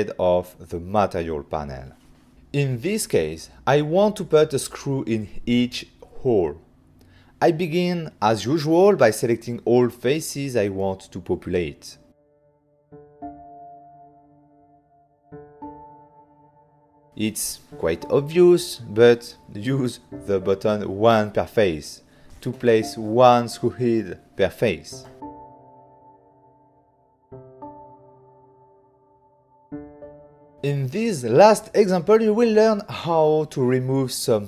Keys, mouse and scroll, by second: 2.5 click, 3.0 middle click, 5.7 click, 5.8 click, 6.3 f, 6.9 click, 7.0 click, 7.6 click, 7.7 click, 8.2 shift+click, 8.4 shift+click, 9.4 click, 9.7 shift+click, 9.9 shift+click, 10.4 shift+click, 11.1 Return, 11.1 shift+click, 11.7 click, 16.3 ctrl+middle click, 22.5 click, 22.9 ctrl+middle click, 24.0 click, 26.5 click, 27.1 middle click, 28.0 right click, 28.1 right click, 28.4 alt+a, 28.7 ctrl+middle click, 29.0 middle click, 29.2 middle click, 30.5 right click, 30.5 click, 31.5 click, 31.7 click, 33.3 f.